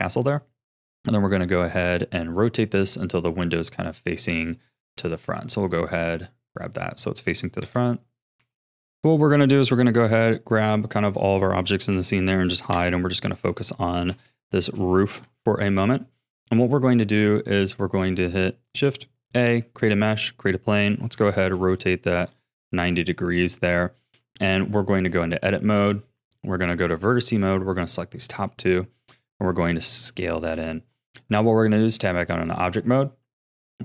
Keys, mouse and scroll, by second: 2.7-4.9 middle drag, 4.9 r, 7.6 KP_1, 8.4 r, 8.9 click, 9.3-11.0 middle drag, 11.0 a, 11.9 h, 12.7 KP_1, 13.4-13.8 scroll up 5, 13.8-15.1 shift+middle drag, 15.1 KP_1, 15.8-16.2 scroll up 3, 16.2-16.9 shift+middle drag, 16.9 shift+a, 20.9 r, 24.2 Tab, 25.7 a, 26.1 1, 27.4 click, 28.3 s, 29.9 a, 30.2 Tab, 32.4-33.8 drag.